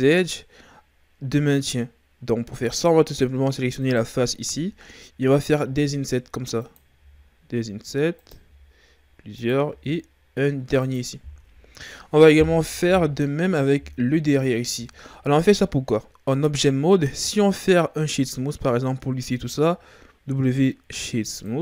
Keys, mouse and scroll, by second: 3.8 right click, 5.6 i, 6.9 i, 8.4 i, 9.6 i, 11.3 Tab, 11.6-12.8 scroll down 1, 12.8 KP_Divide, 14.0 KP_3, 17.1 scroll down 1, 17.3-18.1 scroll up 2, 18.1 w.